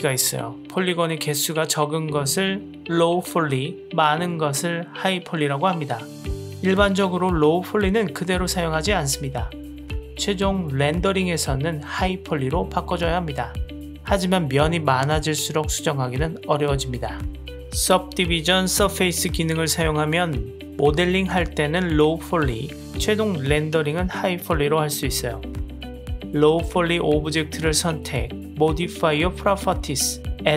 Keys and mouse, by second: 1.8-2.3 drag, 3.4 Tab, 3.8 click, 4.9 click, 6.6 click, 12.3 Tab, 13.2-13.9 drag, 14.6 click, 15.2-16.6 middle drag, 21.1-23.0 shift+middle drag, 23.5-24.6 middle drag, 24.8 click, 29.9-30.5 drag.